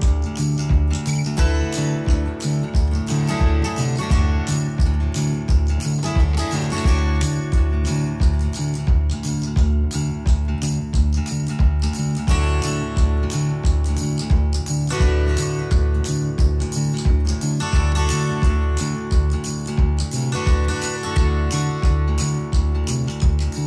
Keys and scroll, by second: 1.5 Escape, 10.1 ctrl+z, 11.3 space, 19.2 Escape, 20.3 Escape, 22.3 d.